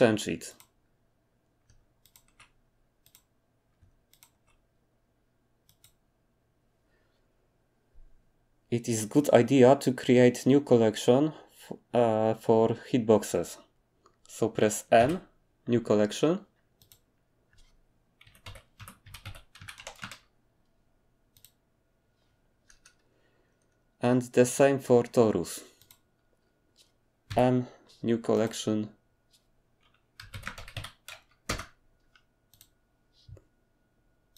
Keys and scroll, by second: 15.0 m, 18.2-20.0 typing, 27.3 m, 30.2-30.7 typing, 31.5 Return.